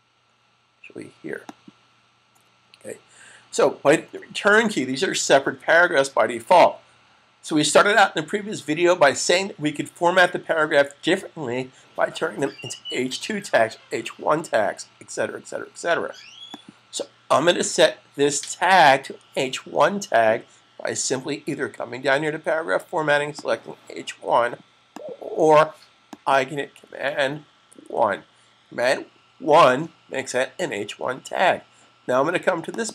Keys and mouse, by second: 1.3 click, 5.3 s, 16.2 click, 23.2 click, 27.6 super+1, 32.6 click.